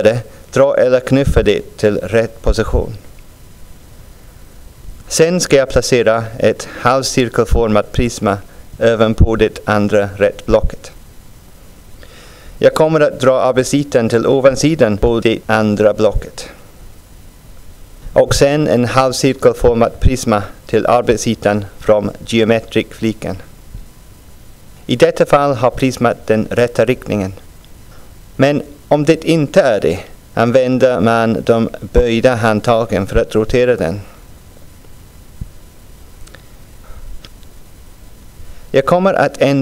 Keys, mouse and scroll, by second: 4.1 scroll up 1, 6.1-6.6 scroll down 1, 11.5 scroll down 1, 13.2-17.0 drag, 18.7-22.7 drag.